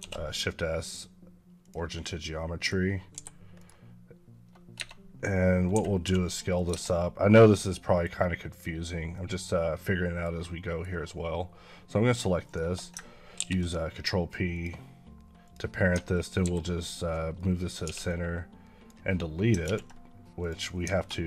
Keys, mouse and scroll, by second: 1.9 middle click, 3.0 g, 3.4 right click, 4.6 Tab, 5.6 a, 5.9 s, 6.4 click, 6.5 Tab, 6.8 middle click, 8.3 click, 8.9 middle click, 10.2 scroll down 1, 10.4 middle click, 12.3 shift+click, 13.2 ctrl+p, 14.4 click, 16.3 alt+g, 17.2 middle click, 17.7 x, 17.9 click, 19.5 ctrl+z, 20.2 click.